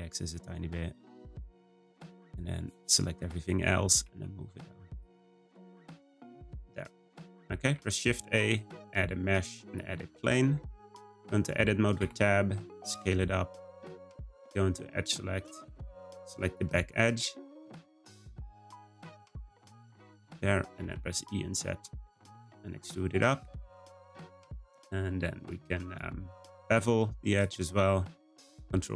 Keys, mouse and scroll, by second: 1.9 Tab, 2.3 click, 3.9 g, 5.1 click, 6.8 click, 7.6 shift+a, 10.9 Tab, 12.0 s, 15.3-16.5 drag, 17.5 click, 18.2 click, 18.8 click, 19.2 middle click, 19.8 click, 20.7 e, 22.4-22.8 scroll down 1, 22.8 `, 24.4 click, 25.3 click, 25.8 click, 26.2 middle click, 26.6-27.2 scroll down 1, 27.2 click, 28.2 b.